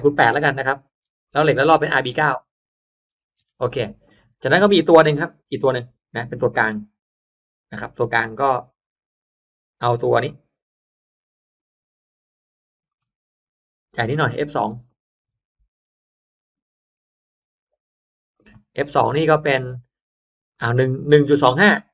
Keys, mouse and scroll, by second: 0.0 click, 0.1 8, 0.6 click, 0.9 8, 1.2 click, 1.2 8, 2.0 click, 3.0 BackSpace, 3.3 9, 4.0 click, 5.1-11.5 drag, 12.8 ctrl+click, 14.6 click, 14.8 click, 17.2 BackSpace, 17.6 2, 18.2 click, 20.4 click, 21.6-21.9 typing.